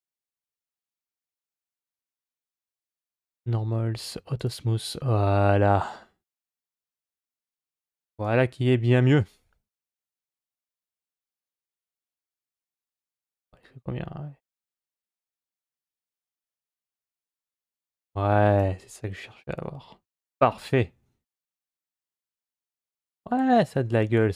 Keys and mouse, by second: 0.7 click, 1.2 click, 4.2 click, 5.9 middle click, 8.1-18.5 drag, 19.4-20.1 middle drag, 21.9-22.5 shift+middle drag, 23.7-24.3 middle drag.